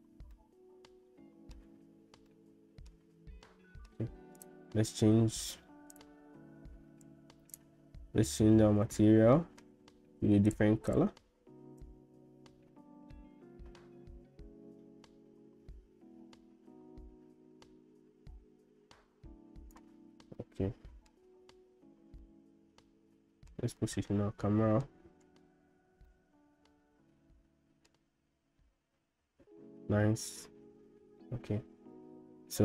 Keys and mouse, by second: 0.5-1.6 middle drag, 2.3 middle click, 3.4 middle click, 5.9 click, 7.5 click, 9.3 shift+middle click, 10.5 click, 20.4 middle click, 22.3-23.5 shift+middle drag, 23.8-24.9 middle drag, 26.2-28.0 shift+middle drag.